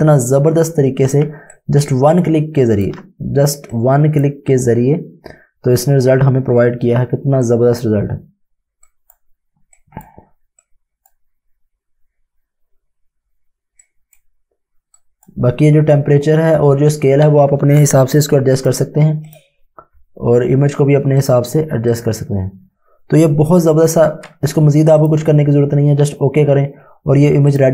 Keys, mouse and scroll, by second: 1.6 click, 7.4 click, 13.8 click, 18.5 click, 24.9 click, 27.5 click.